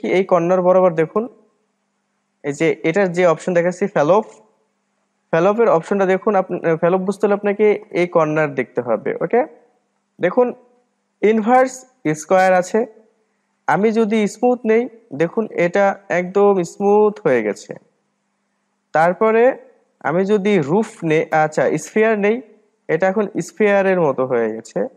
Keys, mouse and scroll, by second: 13.3-16.4 drag, 19.2-22.4 drag.